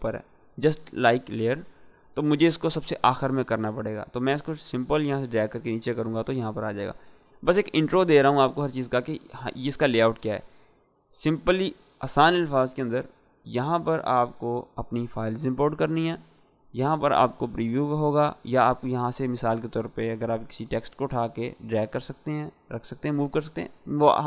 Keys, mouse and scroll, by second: 4.5-5.5 drag, 10.6 click, 10.6 click, 13.4 click, 18.2-22.5 drag.